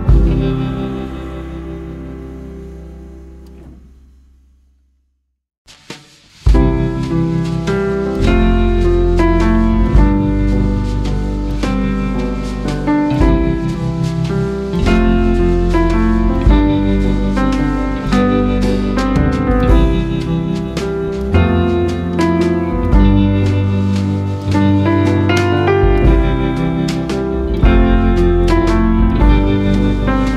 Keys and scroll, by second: 0.9 ctrl+a, 1.7 ctrl+c, 3.1 ctrl+v, 10.2 ctrl+a, 10.5 ctrl+c, 14.3 ctrl+a, 15.0 ctrl+c, 15.5 ctrl+v, 16.6 ctrl+z, 17.5 ctrl+v.